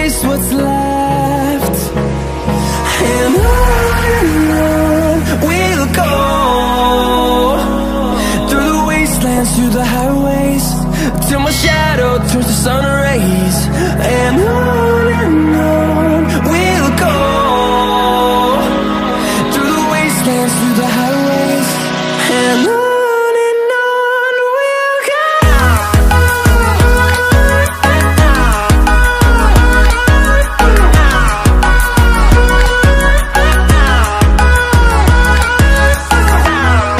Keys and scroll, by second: 7.6 ctrl+z.